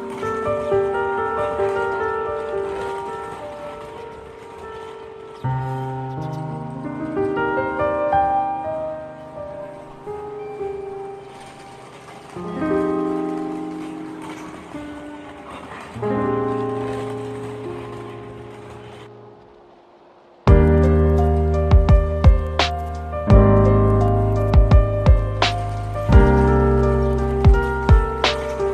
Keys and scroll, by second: 1.6 space, 15.3 ctrl+-, 19.8 ctrl+-.